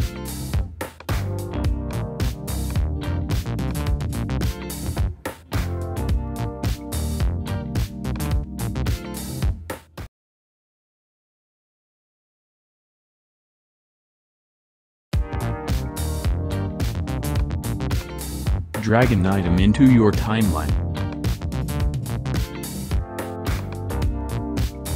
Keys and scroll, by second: 3.9 space, 7.1 space, 8.4 BackSpace, 21.4 Home.